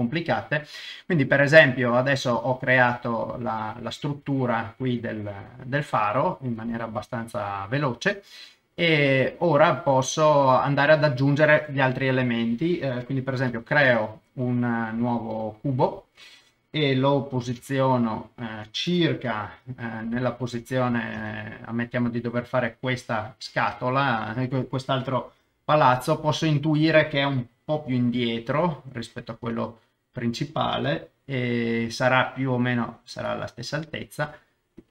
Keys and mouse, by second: 5.5-7.0 middle drag, 7.7 KP_0, 9.6 middle click, 13.5 shift+a, 17.3 g, 17.4 middle click, 18.5 ctrl+click, 19.3 middle click, 20.5 ctrl+click, 21.2 KP_0, 26.2 middle click, 27.9 g, 27.9 middle click, 29.2 click, 29.4 KP_0, 31.8 g, 31.9 middle click, 33.7 click, 34.3 Tab, 34.8 click.